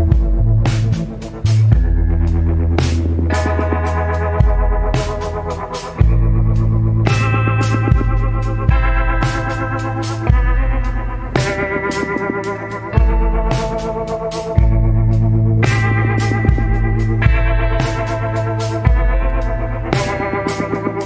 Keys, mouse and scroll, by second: 0.4 scroll up 1, 10.2 scroll down 1, 18.7 scroll down 1, 19.6 scroll up 1.